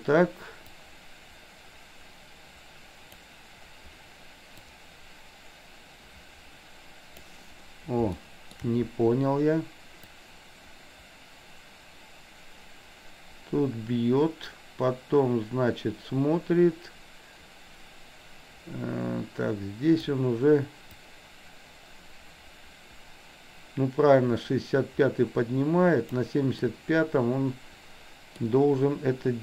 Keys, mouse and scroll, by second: 0.8-3.3 drag, 4.6-7.4 drag, 8.1-8.6 shift+middle drag, 10.3-20.1 drag, 21.0-26.3 drag, 26.6-28.4 middle drag.